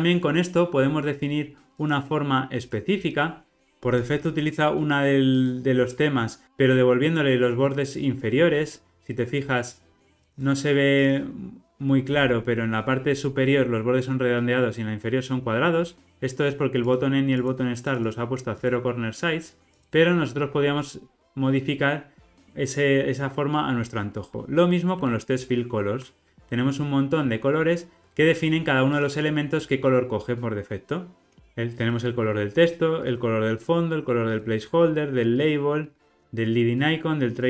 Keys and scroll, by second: 10.0 super+=, 14.7 super+=, 19.6 super+-, 25.7 super+b.